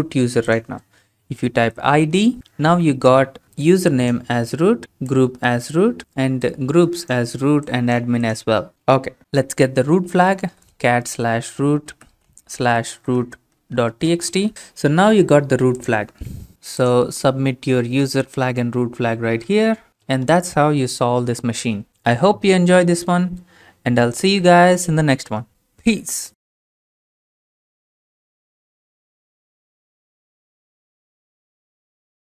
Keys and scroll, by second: 1.3-2.1 typing, 9.9-14.8 typing.